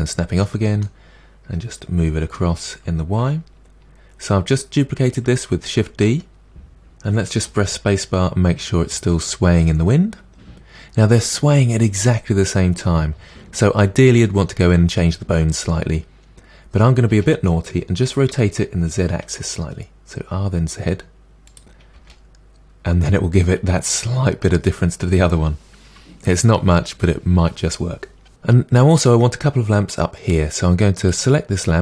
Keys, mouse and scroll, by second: 0.4-2.3 middle drag, 2.3 g, 5.6-7.4 middle drag, 7.4 space, 17.1 space, 18.3 r, 21.9 space, 28.3-31.1 middle drag, 31.1 click.